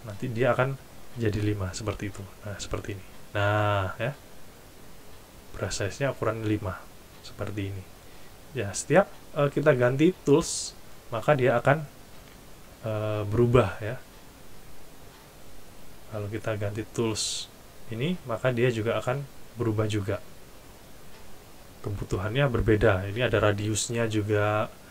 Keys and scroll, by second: 12.3 Delete.